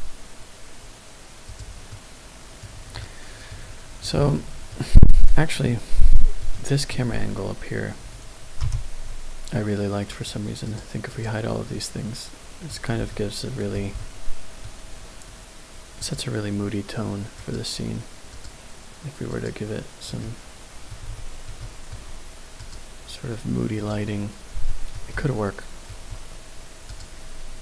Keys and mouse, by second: 1.5 click, 1.9-2.5 middle drag, 3.5-4.0 middle drag, 4.3-4.6 shift+middle drag, 5.2-5.6 middle drag, 6.1 shift+middle click, 6.4 middle click, 8.6 n, 10.2 click, 11.1 click, 11.8-12.7 middle drag, 13.0-13.5 shift+middle drag, 13.9-14.5 middle drag, 16.0-19.9 drag, 20.2-20.9 middle drag, 21.1-21.4 shift+middle drag, 21.6 middle drag, 22.6-24.4 drag, 24.7 shift+middle drag, 25.1-25.8 middle drag.